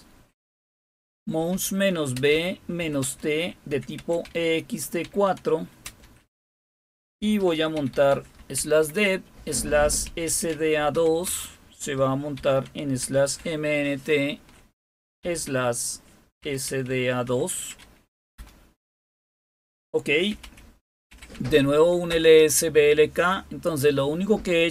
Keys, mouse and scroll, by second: 0.4-5.8 typing, 7.1-8.5 typing, 10.0-11.2 typing, 12.3-13.3 typing, 15.2 typing, 16.3-18.8 typing, 20.0-22.7 typing.